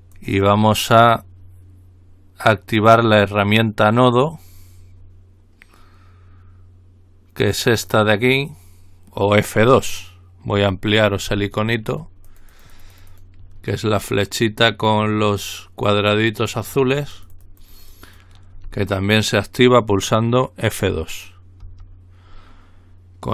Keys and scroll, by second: 21.9 F2.